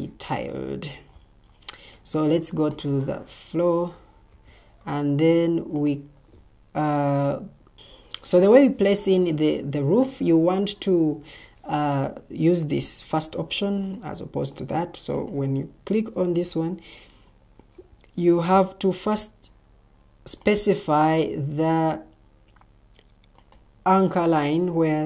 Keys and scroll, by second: 7.7 Escape.